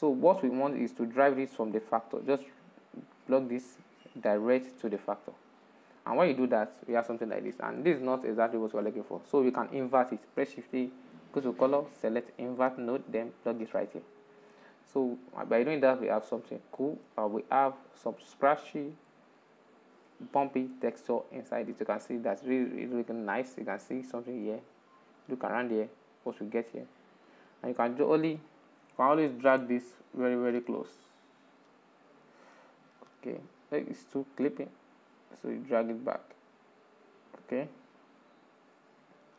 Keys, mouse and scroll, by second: 0.8 click, 3.4 click, 6.1-10.3 middle drag, 15.0-17.3 middle drag, 17.3 scroll up 1, 18.0 scroll up 2, 18.2-23.3 shift+middle drag, 23.7-27.0 middle drag, 27.0-27.4 scroll down 2, 28.2 scroll up 4, 28.4 shift+middle click, 29.0-29.4 scroll up 5, 29.5-30.4 shift+middle drag, 30.4-33.5 drag, 34.3-39.3 drag.